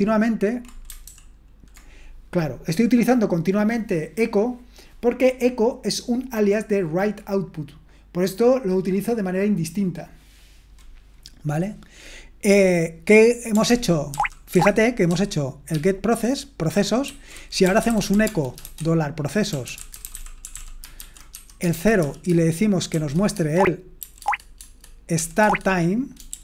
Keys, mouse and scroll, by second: 14.1 ctrl+o, 14.5 ctrl+o, 15.1 ctrl+p, 15.7 ctrl+p, 17.1 ctrl+c, 17.4-21.7 typing, 23.4-26.3 typing.